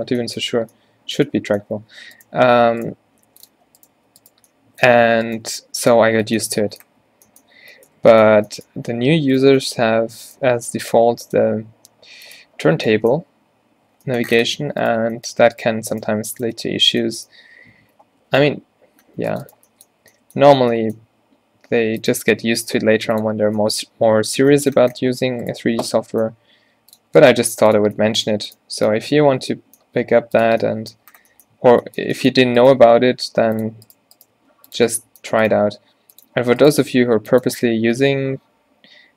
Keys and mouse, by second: 0.1 Tab, 0.5 Tab, 1.8 z, 3.0 g, 3.6 z, 4.0 g, 5.5 g, 6.1 Tab, 7.0 a, 8.4 Tab, 9.4 click, 10.6 g, 11.5 e, 12.7 z, 13.4 z, 16.7 f, 17.9 ctrl+r, 20.1 z, 22.1-24.0 drag, 22.5 g, 23.4 z, 26.4 g, 27.5 g, 29.4 middle click, 30.0 g, 30.6 Tab, 31.7 Tab, 32.9 g, 34.4 g, 35.9 g, 36.9 g, 37.6 Tab.